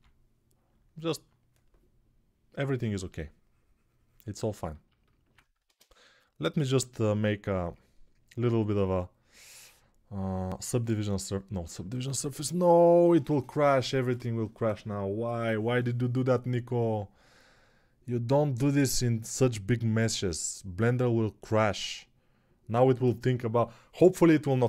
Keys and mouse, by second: 5.4 ctrl+space, 6.6 middle click, 12.2-24.6 drag.